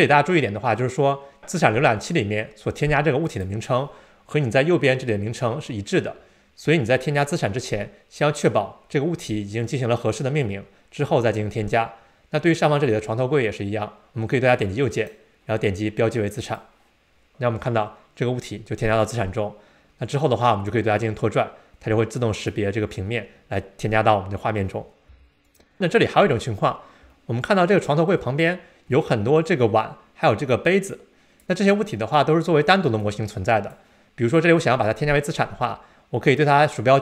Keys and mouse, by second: 3.4 click, 14.5 click, 15.0-16.6 right drag, 20.8-22.6 drag, 25.1 x, 27.1-30.2 shift+middle drag, 30.2-31.4 drag, 33.1-33.8 drag, 36.4-37.0 drag.